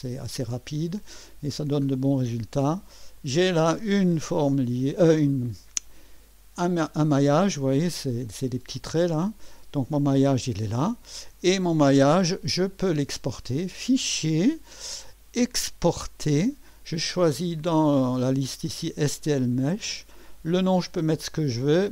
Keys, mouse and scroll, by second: 0.0 click, 3.2 click, 4.4 2, 5.2-7.3 drag, 11.3 2, 13.7 click, 15.9 click, 19.0 click.